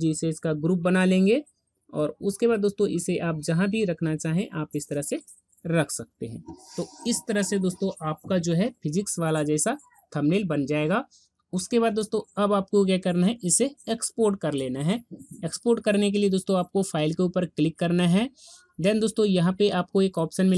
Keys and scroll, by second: 0.0 ctrl+g.